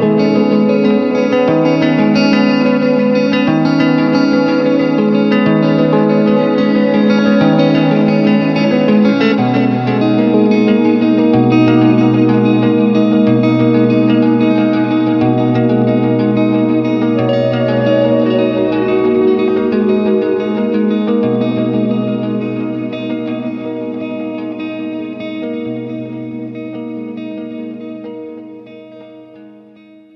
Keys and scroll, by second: 4.4 ctrl+KP_Add, 4.6 s, 6.0 [, 10.0 space, 11.7 space, 12.1 w, 13.5 Return, 14.7 3, 15.1 Return, 16.2 ctrl+m, 17.6 Return, 18.2 ctrl+KP_Subtract, 18.8 alt+i, 18.9-19.9 typing, 21.7 Return, 22.2 space, 22.6 ctrl+w, 22.8 Return, 24.1 alt+space, 24.5 c, 25.6 Return, 26.2 ctrl+KP_Add, 26.9 alt+i, 27.2 alt+a, 27.6 ctrl+space, 28.2 ctrl+shift+q.